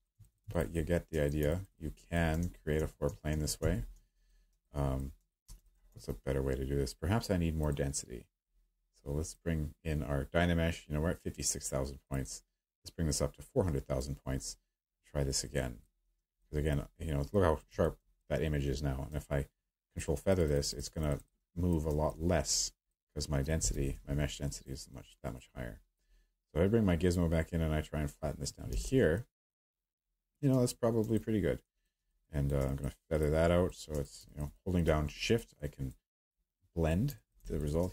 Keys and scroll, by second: 2.4 ctrl+z, 3.0 z, 3.3 z, 3.6 z, 23.7 w, 28.7 q.